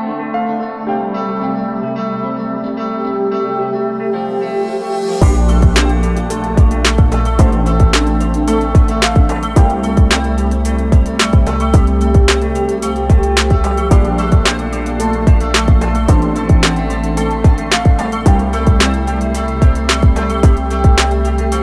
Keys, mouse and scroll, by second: 4.9 click, 5.3-5.6 ctrl+scroll down 1, 6.1-6.7 scroll down 1, 6.8 alt+scroll down 1, 7.5-8.1 scroll down 1, 8.1 alt+scroll down 1, 8.3-9.2 alt+scroll up 2, 14.1 click, 14.5-15.6 alt+scroll up 2, 16.6 ctrl+click, 17.4 ctrl+click, 17.8 ctrl+click, 20.3 click.